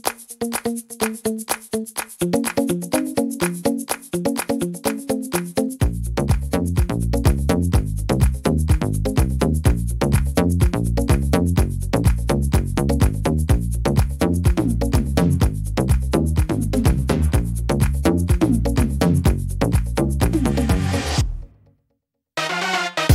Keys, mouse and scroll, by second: 0.2 middle click, 0.6-1.5 scroll up 3, 1.0 middle click, 1.5 scroll down 2, 1.8 middle click, 4.1 middle click, 5.0 right click, 5.6 shift+right click, 6.2 right click, 6.7 shift+right click, 7.8 click, 9.0 click, 11.0 middle click, 11.5 scroll down 2, 11.9 middle click, 13.6 scroll up 3, 14.1 middle click, 14.9 scroll down 2, 15.3 middle click, 16.3-17.6 scroll up 3, 16.7 middle click, 17.6 ctrl+r, 19.4 middle click, 21.2 ctrl+r.